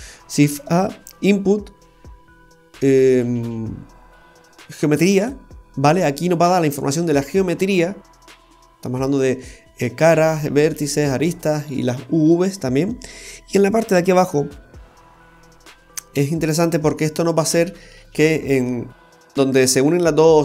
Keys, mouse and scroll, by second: 0.2 Delete, 0.4 shift+a, 5.9 typing, 11.2-11.7 scroll up 3, 12.7-13.0 scroll up 2.